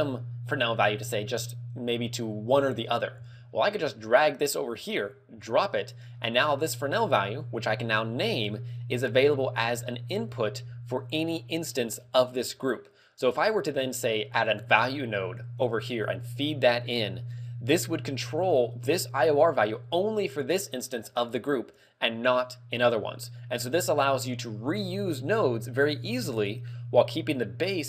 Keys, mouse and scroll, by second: 3.8 click, 7.5 click.